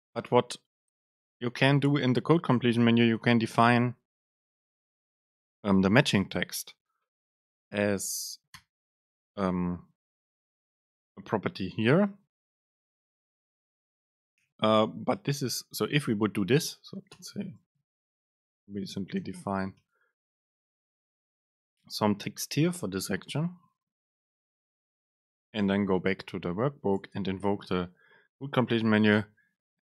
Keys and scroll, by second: 6.4 super+space, 12.3 super+space, 15.0 BackSpace, 16.1 super+space, 19.9 BackSpace, 23.0 ctrl+shift+super+F9, 27.1 super+space.